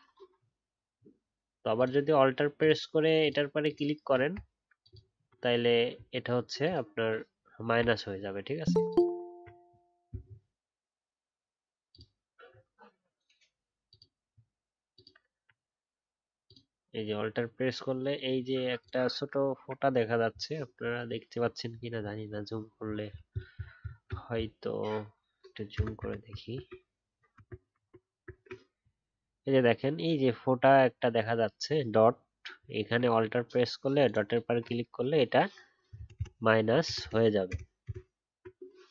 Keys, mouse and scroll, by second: 1.7 alt+click, 4.8 alt+click, 8.9 alt+click, 10.2-11.8 alt+scroll up 1, 11.8 alt+click, 21.3-21.7 alt+scroll up 1, 22.8 alt+scroll down 1, 25.7 super++, 37.7 super+-.